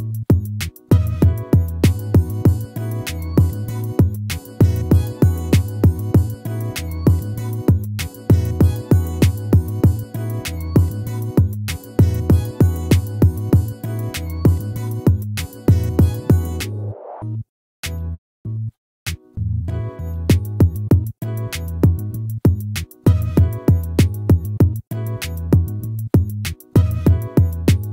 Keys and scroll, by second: 9.8 ctrl++, 17.0 ctrl+z, 23.5 ctrl+z.